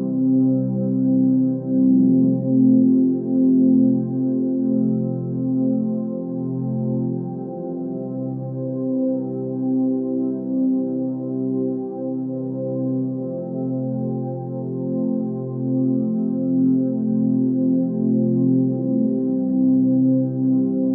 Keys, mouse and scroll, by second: 5.7 ctrl+space, 7.3 ctrl+z, 8.1 ctrl+space, 11.0 ctrl+space, 13.3 g, 18.0 z, 18.5 z.